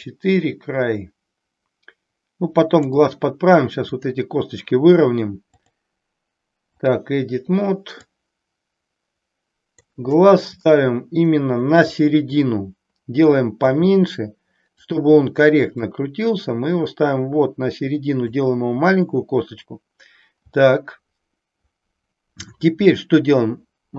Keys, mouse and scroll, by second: 3.8 click, 5.5-6.9 drag, 8.0-9.8 drag, 10.7 shift+middle click, 13.5 s, 15.8-18.2 drag.